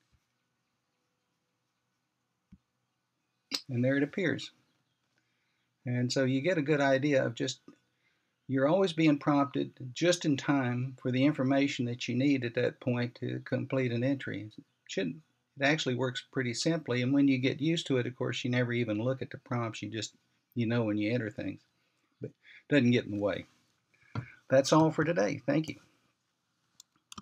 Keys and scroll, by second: 0.3 ctrl+c.